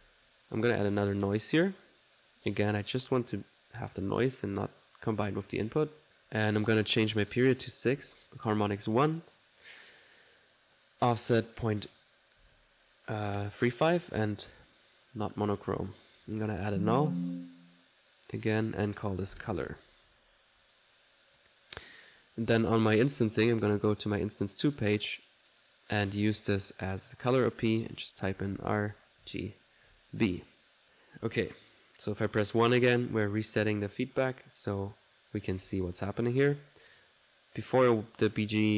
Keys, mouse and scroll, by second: 0.0-0.8 typing, 0.3-2.6 drag, 1.3 middle click, 3.0 click, 3.4 click, 4.1 click, 4.4-8.1 drag, 8.0-8.7 typing, 8.5 ctrl+click, 11.3 click, 14.1 click, 15.1 click, 16.2 click, 16.2 typing, 16.7 alt+n, 17.1 alt+click, 17.5 alt+click, 17.7 typing, 18.1 alt+click, 21.3 click, 22.2 click, 22.9 click, 23.8 click, 25.1-27.4 drag, 25.3 typing, 27.8 click, 30.5 click, 31.0 middle click, 31.1 alt+1, 32.1 click, 36.0 middle click, 36.2 1, 36.8 click, 37.3 click, 38.7 middle click, 38.7 click.